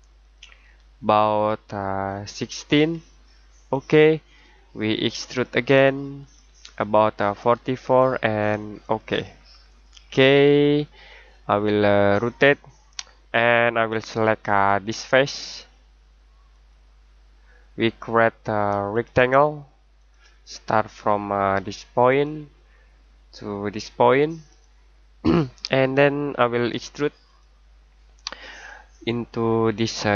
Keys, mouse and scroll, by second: 0.2 click, 2.2 typing, 3.7 click, 8.8 click, 9.4 scroll down 1, 9.7-10.7 scroll up 1, 10.7-11.3 scroll down 1, 11.3 middle click, 13.6-13.9 scroll down 1, 13.9-14.6 scroll up 1, 14.6-16.5 scroll down 1, 16.5 click, 28.3 scroll down 1, 28.5-29.2 scroll up 1, 29.9 click.